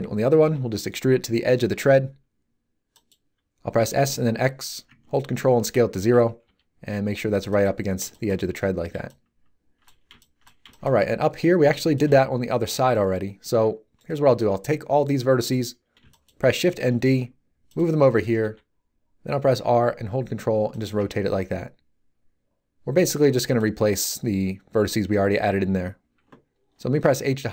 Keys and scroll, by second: 0.4 e, 3.7 s, 4.1 x, 6.4 g, 14.2 b, 16.6 shift+d, 18.3 r, 21.2 g, 27.0 h.